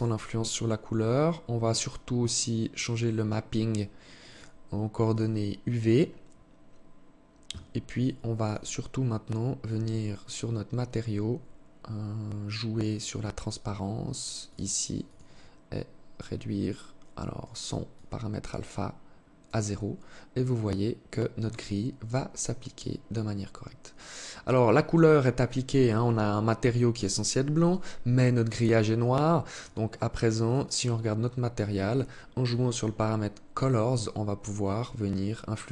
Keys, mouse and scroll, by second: 0.5-1.6 scroll down 5, 1.6 scroll down 1, 2.0 click, 3.5 click, 5.0 click, 5.6-6.0 scroll up 3, 7.1 scroll down 1, 7.4 scroll up 1, 7.6 click, 7.6 scroll down 1, 8.0 scroll up 1, 8.2 scroll down 1, 8.5 scroll up 1, 8.8-9.4 scroll down 1, 9.6 scroll up 1, 9.8-10.2 scroll down 3, 10.8 scroll down 1, 11.0 scroll up 1, 11.4 scroll down 2, 13.7 click, 14.2 click, 15.4 click, 17.1 click, 19.2 scroll up 2, 28.8 click, 29.7 click, 30.9 scroll down 1, 31.7 click.